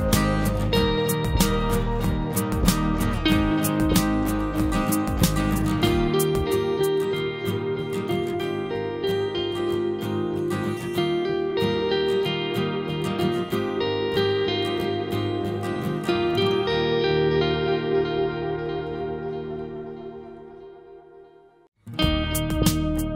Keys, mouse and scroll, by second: 0.1 scroll down 1, 0.2 click, 2.4 click, 6.3 scroll down 1, 8.9 scroll up 1, 8.9 click, 14.2 click, 14.2 click, 16.8 typing, 18.6 click, 19.3 typing.